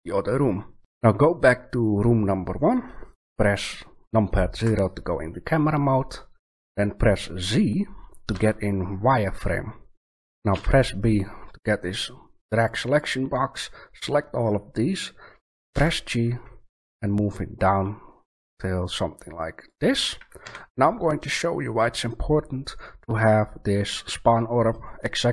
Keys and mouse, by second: 4.5 KP_0, 8.3 z, 10.5 b, 15.7 g, 19.7 click, 20.4 a.